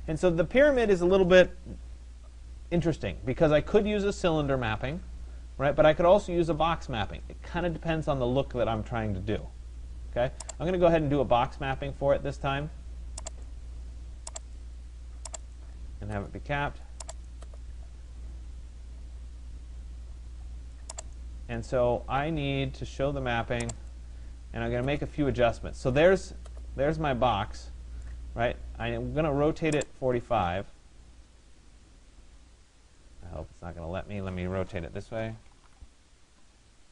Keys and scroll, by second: 35.6 Return.